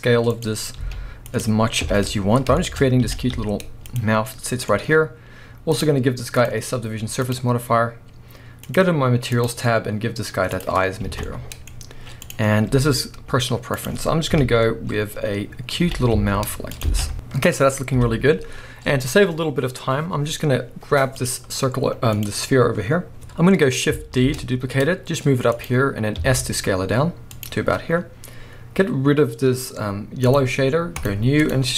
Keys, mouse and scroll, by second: 0.4 click, 0.8 s, 1.4 click, 1.8 KP_1, 2.5-3.0 shift+scroll up 2, 2.6-4.0 shift+middle drag, 3.0 g, 4.0 click, 4.2 scroll down 1, 4.3-5.8 middle drag, 5.8 click, 6.3-8.8 drag, 9.3-11.2 drag, 10.8 scroll down 1, 11.0 alt+a, 11.2-12.2 middle drag, 11.7-12.2 scroll up 1, 12.2 click, 12.7 s, 13.9 click, 14.3 KP_1, 15.0-15.5 scroll up 1, 15.8 g, 16.8 click, 17.0 a, 17.0 scroll down 1, 17.1-21.2 middle drag, 17.9 KP_1, 18.6-20.8 scroll up 1, 21.2 click, 22.1 click, 23.2-25.7 shift+middle drag, 24.3 shift+d, 25.7 click, 26.2 s, 27.4 click, 30.3-31.7 drag.